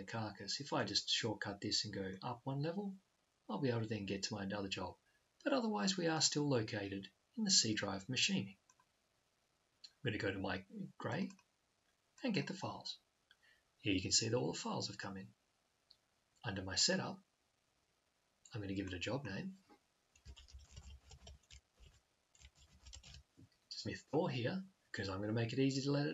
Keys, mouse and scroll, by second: 2.3-4.0 drag, 10.9 double click, 16.5 click.